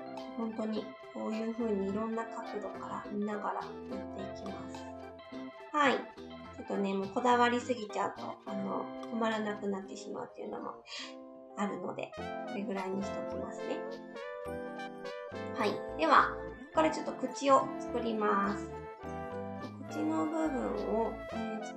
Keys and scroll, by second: 1.9 s, 10.6 s.